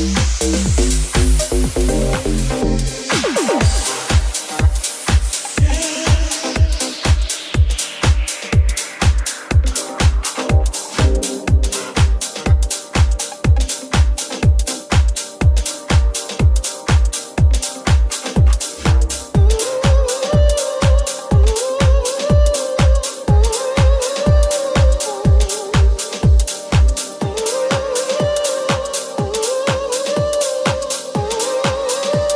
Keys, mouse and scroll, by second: 0.4 e, 3.7 Tab, 3.7-14.7 middle drag, 5.0 s, 12.7 Tab, 14.1 f, 14.7 alt+right click, 14.8-19.9 alt+middle drag, 17.0 i, 19.9 right click, 20.6-22.3 alt+right drag, 22.3-29.5 middle drag, 24.9 Tab, 25.1 w, 28.3 Tab, 29.9-32.3 middle drag, 29.9 3.